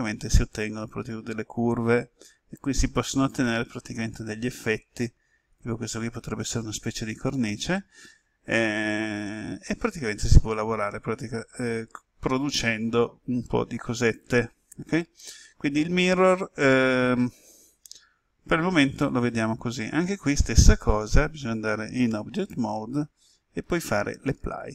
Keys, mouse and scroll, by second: 7.2 click, 10.2-16.3 middle drag, 22.0 Tab, 24.1 click.